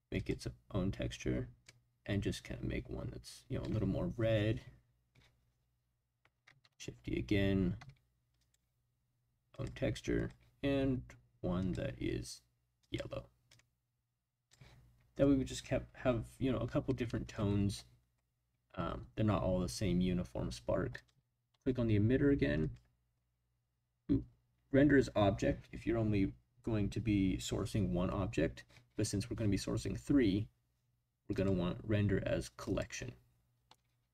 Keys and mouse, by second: 0.2 drag, 6.6 shift+d, 7.7 x, 8.4 click, 9.5 click, 10.1 click, 11.6 drag, 17.1 middle click, 20.9 click, 31.4-32.7 drag.